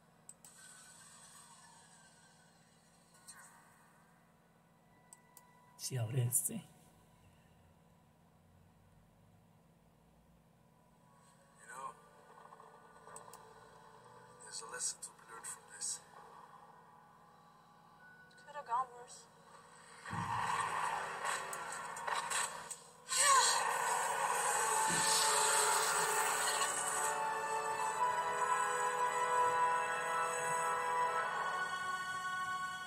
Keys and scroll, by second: 28.1 super+1, 32.4 super+2.